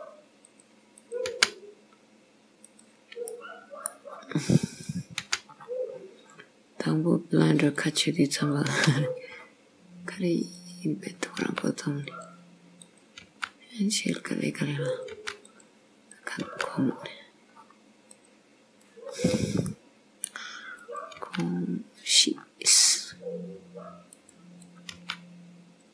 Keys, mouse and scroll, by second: 1.1 click, 1.5 g, 3.3 middle click, 4.2-4.8 scroll up 1, 4.8 click, 4.8 scroll up 1, 5.3 g, 8.5 click, 8.8 g, 11.1 click, 11.5 g, 12.9 click, 13.3 g, 14.9 click, 15.2 g, 16.2 click, 16.5 g, 19.2-19.7 scroll down 2, 19.7 middle click, 20.8 click, 21.3 g, 24.7 click, 25.0 g.